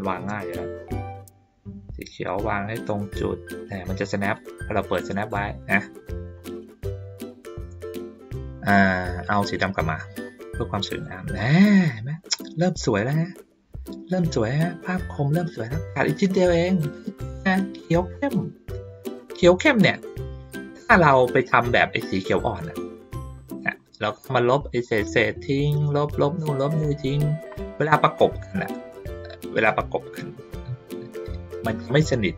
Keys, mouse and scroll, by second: 0.9-4.3 drag, 9.2-13.1 drag, 13.8-14.2 ctrl+middle drag, 14.7 ctrl+middle click, 15.0 ctrl+middle click, 15.4 ctrl+middle click, 17.0 ctrl+middle click, 19.9 ctrl+middle click, 20.4 middle click, 21.5 click, 22.0 click, 23.2 middle click, 24.0 ctrl+scroll up 1, 27.3 ctrl+scroll up 1, 28.1 middle click.